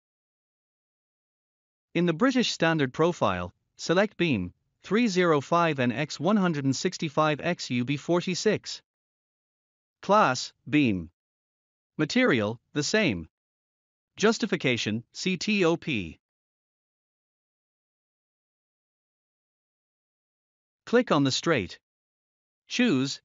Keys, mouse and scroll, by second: 1.2 scroll down 1, 5.0 click, 5.6-6.7 scroll up 1, 7.7 click, 9.9 click, 10.5-11.6 scroll up 1, 11.6 click, 16.0 click, 18.3 click, 19.2 scroll up 1, 20.5 scroll up 1.